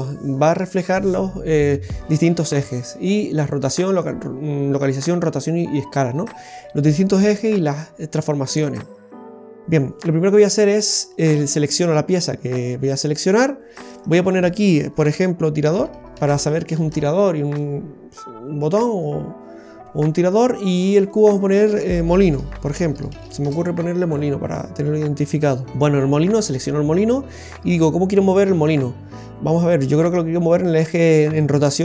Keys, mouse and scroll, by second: 13.8 click, 14.0 click, 18.8 right click, 20.9 click, 21.0 click.